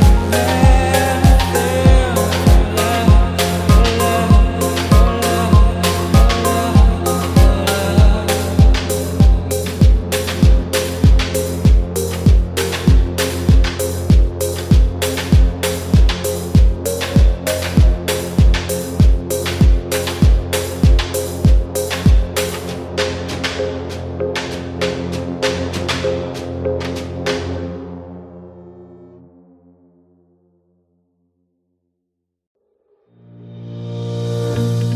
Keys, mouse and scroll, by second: 3.5-5.2 right drag, 8.1-9.4 ctrl+right drag, 10.6 ctrl+z, 12.0-14.8 right drag, 15.4-17.5 right drag, 18.2-20.3 drag, 21.3-22.5 right drag, 24.3-26.3 right drag, 27.7-31.9 right drag, 33.8-34.9 right drag.